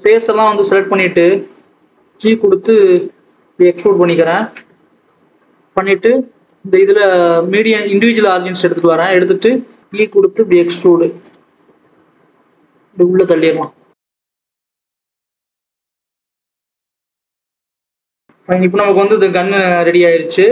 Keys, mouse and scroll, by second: 0.5 shift+click, 0.9 shift+click, 1.3 shift+click, 1.7 scroll down 1, 1.9 g, 7.7-9.8 drag, 9.8 s, 11.4-11.8 scroll up 2, 11.8 e, 15.8-16.1 scroll down 3, 16.1 Tab, 16.8 alt+a, 16.9 click, 19.7 click, 20.0-20.5 scroll up 6.